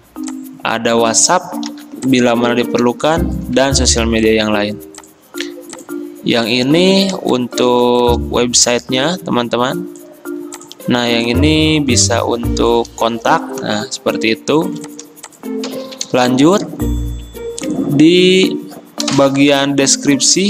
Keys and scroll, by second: 1.8 ctrl+g.